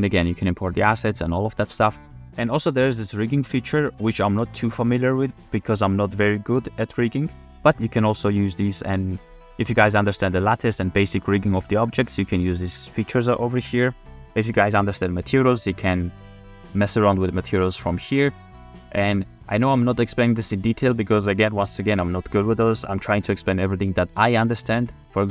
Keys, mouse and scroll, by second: 8.4-9.7 drag, 10.9 click.